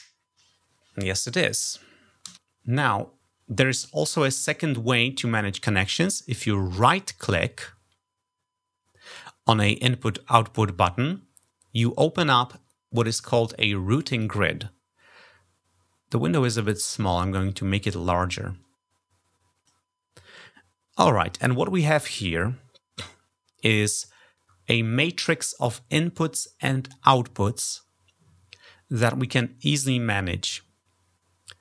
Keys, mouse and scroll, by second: 6.6 click, 16.4-17.7 drag, 18.4-19.5 drag.